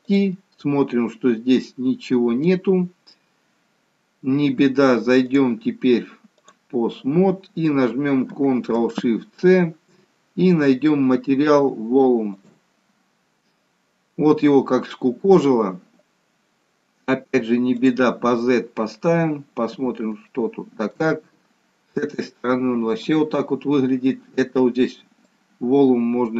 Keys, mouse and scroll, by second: 0.0 click, 5.3 click, 9.4 ctrl+shift+c, 17.7 click, 18.9-20.0 scroll up 6, 20.2 shift+middle click, 21.2 middle click, 25.1 click.